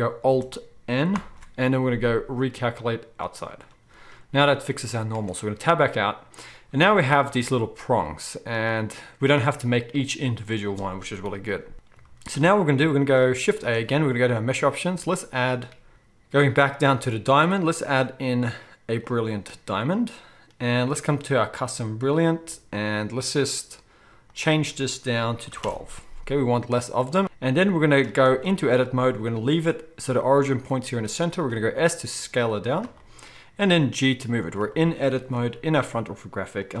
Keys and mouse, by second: 1.1 alt+n, 4.1-27.2 right drag, 5.1 Tab, 7.4 alt+a, 11.2 KP_1, 13.5 shift+a, 21.5-27.7 drag, 21.5-27.2 middle drag, 27.2 ctrl+z, 27.7-36.8 shift+right drag, 28.3 Tab, 32.8 shift+s, 33.6 g, 35.8 r, 36.7 g.